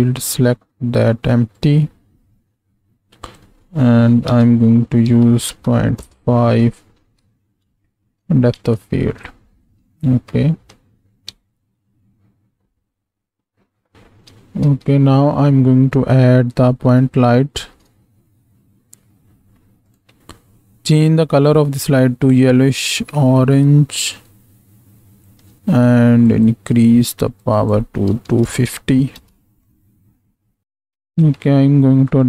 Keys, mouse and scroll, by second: 3.4-6.5 drag, 6.9 z, 7.9 shift+click, 8.6 ctrl+space, 10.2-10.7 shift+drag, 11.4 space, 13.9 shift+Left, 14.5 ctrl+space, 17.5 shift+a, 26.7 click, 27.5-29.6 drag, 30.6 space, 31.1 ctrl+space, 32.1 click.